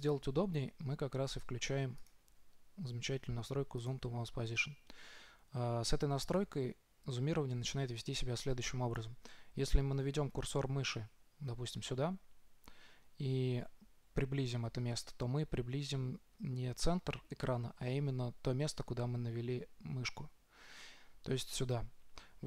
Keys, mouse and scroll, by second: 0.9-2.4 drag, 6.8 click, 14.9 middle click, 15.0-18.2 scroll up 1, 18.2 middle drag, 20.2-22.1 middle drag, 22.3-22.4 middle drag.